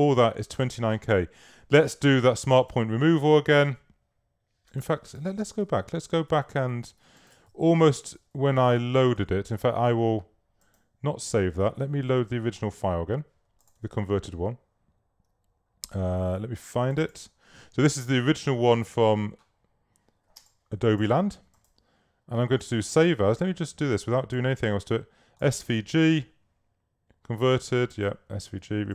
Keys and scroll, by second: 5.5 super+z, 9.7 super+w, 20.5 space.